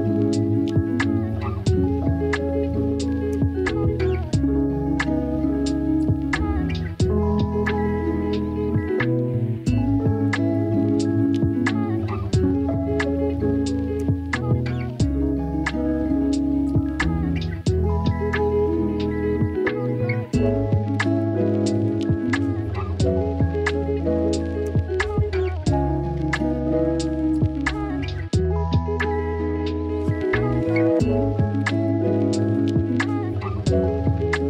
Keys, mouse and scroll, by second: 0.0 shift+a, 2.4 s, 3.9 shift+middle drag, 5.0 g, 7.0 Tab, 8.7 Tab, 9.1-10.1 middle drag, 10.1 s, 11.4 click, 12.0-12.7 drag, 15.0 Tab, 15.4 Tab, 17.2 e, 19.4 s, 20.4 e, 23.4 click, 24.1 s, 25.6 s, 26.7 shift+click, 26.8 shift+middle click, 27.5 Tab, 28.8 Tab, 29.5 click, 30.2 ctrl+z, 30.5-31.9 drag, 32.3 click, 34.2 middle click.